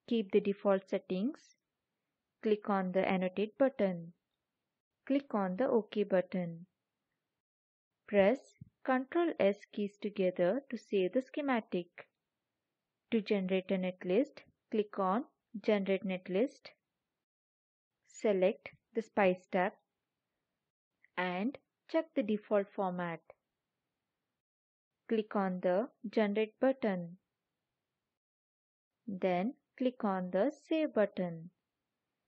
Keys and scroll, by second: 8.9 ctrl+s.